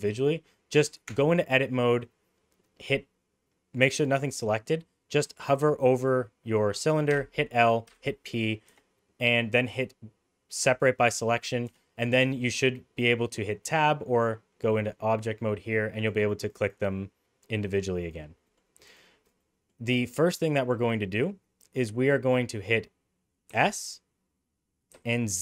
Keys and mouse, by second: 1.1 Tab, 7.1 l, 7.9 p, 8.7 Escape, 10.6 p, 12.2 Tab, 13.9-15.2 drag, 16.6 click, 18.0 click, 18.5 middle click, 19.4 middle click, 23.5 s.